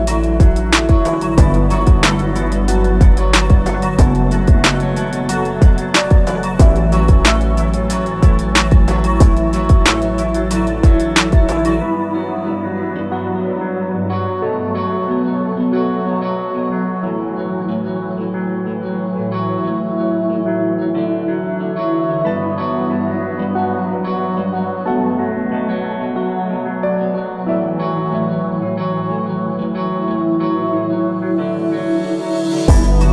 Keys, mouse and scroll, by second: 4.4 Left, 7.0 shift+click, 7.9 shift+click, 9.8 scroll down 1, 10.5 scroll down 1, 12.3 click, 13.1-13.6 scroll down 1, 13.6 click, 14.3 scroll up 1, 14.9 click, 18.0 click, 18.3 scroll down 1, 19.5 ctrl+a, 21.2 shift+m, 22.2 scroll up 1, 22.8-23.5 alt+scroll down 2, 23.5 click, 25.0-25.3 alt+scroll up 1, 26.2 alt+click, 27.7 click, 28.2 scroll down 1, 28.9 scroll up 1, 30.4 click, 30.8 scroll down 1, 31.3 scroll up 1, 32.5 alt+click, 32.9-33.1 scroll down 2.